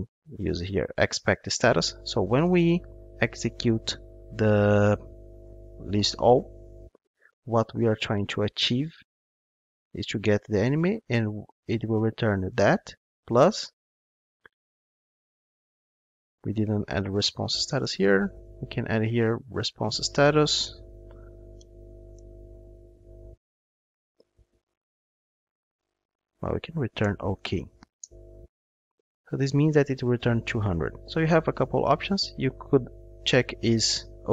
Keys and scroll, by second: 1.2 Return, 19.9 Return, 23.0 ctrl+space, 26.5 Return, 27.0 alt+BackSpace, 27.9 alt+BackSpace, 28.1 Return, 29.1 ctrl+Tab.